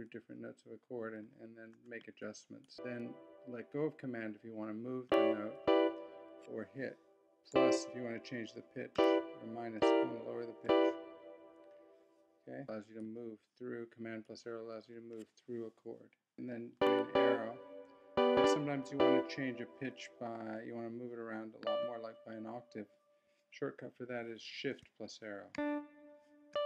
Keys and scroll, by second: 1.7 super+Up, 2.7 Down, 5.1 Up, 5.6 Down, 12.6 super+Up, 12.8 super+Down, 14.7 super+Up, 16.3 super+Down, 18.1 Up, 25.5 shift+Down, 26.5 shift+Up.